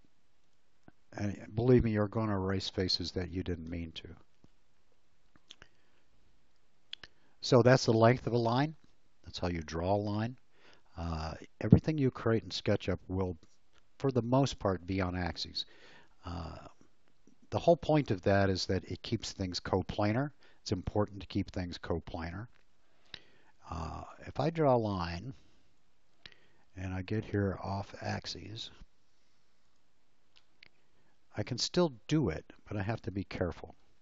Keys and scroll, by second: 2.0 space, 24.1 l.